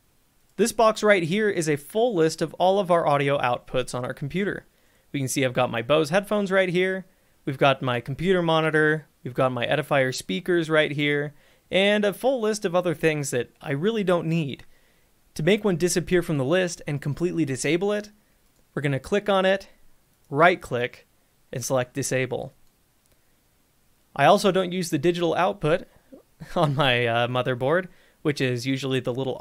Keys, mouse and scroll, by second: 0.6 click, 3.1 click, 11.0-13.7 scroll, 18.8 click, 20.5 right click, 22.7 click, 25.4 click.